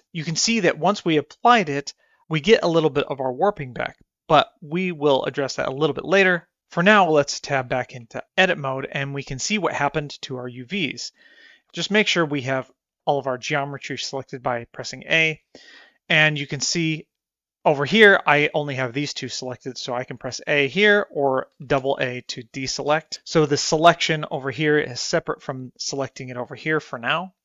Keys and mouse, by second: 8.3 Tab, 13.2 a, 20.9 a, 22.2 a, 22.4 a.